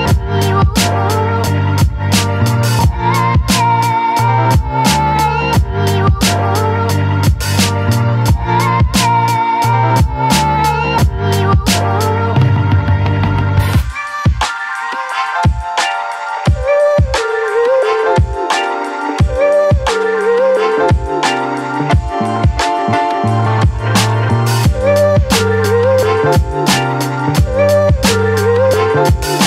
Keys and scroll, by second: 0.0-2.4 typing, 5.8 Return.